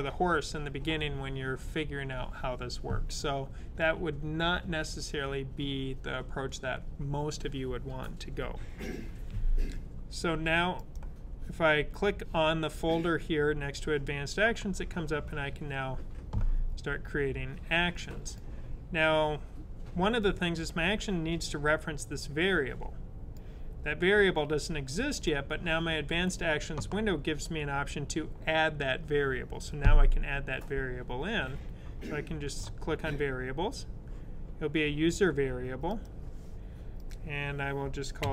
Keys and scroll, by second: 38.1 c.